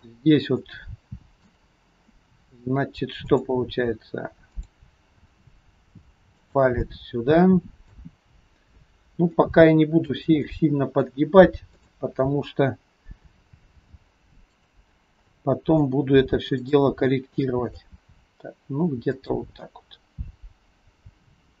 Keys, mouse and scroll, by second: 0.0 click, 0.6 middle click, 2.1 middle click, 3.2 click, 4.6 click, 5.2 r, 6.8 middle click, 6.8-7.5 scroll up 1, 8.3-9.3 scroll down 3, 9.4 shift+middle click, 10.5 middle click, 11.7 click, 13.5 r, 15.3 middle click, 16.6 click, 17.5 middle click, 18.0 r, 19.7 middle click.